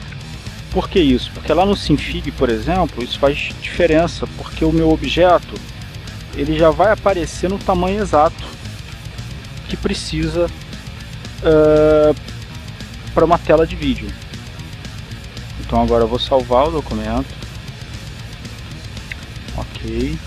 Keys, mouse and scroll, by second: 0.9 click, 1.9 click, 3.9 click, 4.6-5.8 drag, 6.4-7.9 ctrl+shift+drag, 13.4 click, 14.1 click, 16.2 click, 17.1 click, 18.1 click.